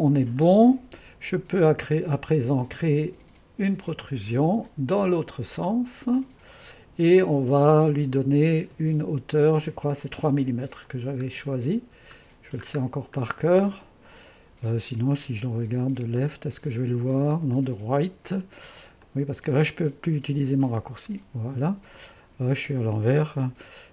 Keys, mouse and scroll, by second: 0.5-5.0 drag, 6.2-7.3 drag, 10.9 click, 11.3 middle click, 11.4 click, 16.2-23.9 drag.